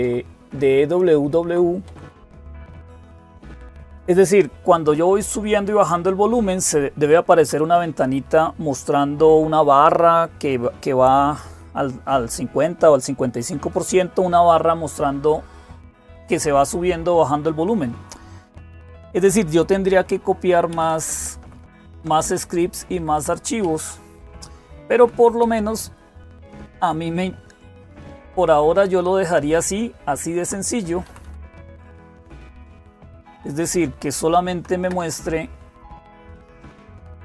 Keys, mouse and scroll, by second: 0.3 BackSpace, 1.0-1.3 Left, 1.7 Down, 1.9 Down, 2.1 Down, 2.8 Up, 3.1 Up, 19.8 Down, 20.5 Right, 20.7 Right, 20.8 Right, 21.0 Right, 21.2 Right, 21.7 Right, 21.8 Right, 22.0 Right, 22.8 Left, 23.0 Left, 23.1 Left, 23.4 Down, 24.1-24.8 Down, 24.1 typing, 25.3 Down, 26.6 Down, 26.6-27.6 Up, 27.3 Down, 27.3 Right, 27.3 Left, 28.6 Up, 30.9 Down, 30.9 Up, 31.1 Down, 31.2 Down, 31.4 Down, 31.5 Down, 37.0 click.